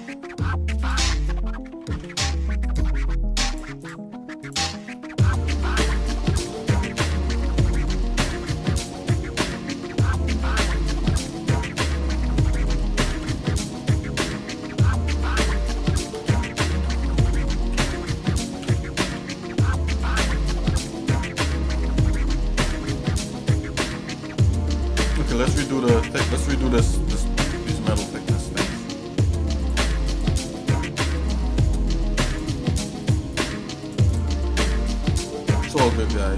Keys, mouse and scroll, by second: 0.8 shift+click, 1.9 ctrl+z, 2.6 shift+click, 3.8 shift+click, 4.5 shift+click, 5.0 shift+middle click, 5.6-6.1 scroll down 2, 6.1 shift+middle click, 6.6-6.9 scroll down 1, 6.9 middle click, 10.4 shift+middle click, 11.7 shift+middle click, 12.6 g, 20.6-21.9 shift+middle drag, 22.4-22.9 scroll down 3, 22.7 scroll up 1, 23.1-25.0 shift+middle drag, 25.1 shift+middle click, 27.6 shift+middle click, 28.3 click, 28.7 shift+middle click, 29.6 shift+click, 30.2 shift+click, 31.3 click, 31.7 shift+middle click, 32.3 shift+click, 33.4 shift+click, 34.2 shift+click, 34.6 shift+middle click, 35.1 middle click, 35.7 shift+middle click.